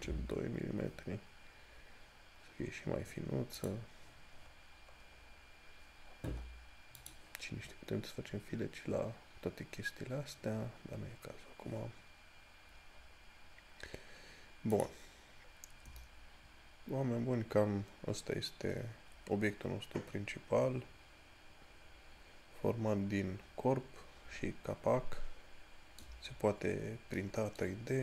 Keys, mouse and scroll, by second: 3.9 click, 11.1 scroll down 1, 15.0 click, 15.5 scroll down 1, 27.4 middle click, 27.6 middle click.